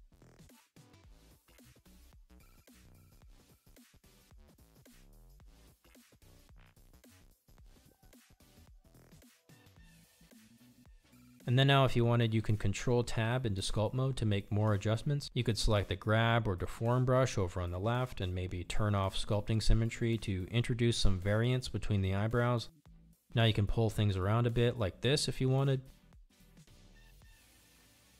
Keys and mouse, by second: 2.7-5.8 drag, 7.4-9.2 drag, 14.6 ctrl+Tab, 17.4-18.7 drag, 19.6 ctrl+z, 23.9 f, 24.0 click, 24.5 click, 25.2 click, 25.6 click, 26.0 click, 26.8 click, 26.8 f, 27.1 click, 27.8 click.